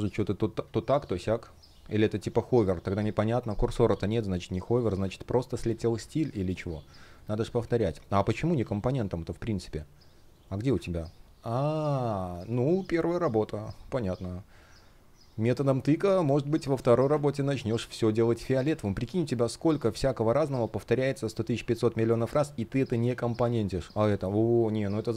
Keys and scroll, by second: 5.5 alt+super+c, 6.2 alt+super+v, 12.2 space, 19.3 space.